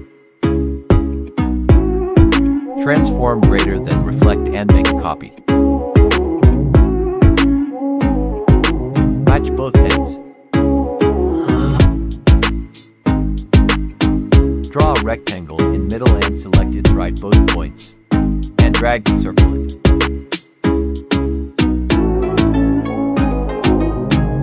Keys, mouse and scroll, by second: 2.1 Delete, 2.2 click, 2.7 right click, 2.7 right click, 4.2-11.0 drag, 11.0 Right, 11.5 click, 13.8-20.6 drag, 20.6 Right, 22.2 click.